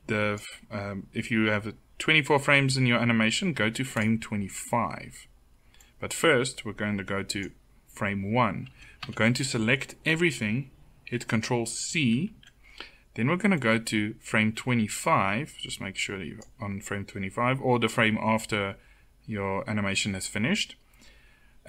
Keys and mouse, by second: 8.4 a, 8.7 a, 11.7 ctrl+c, 21.6 a.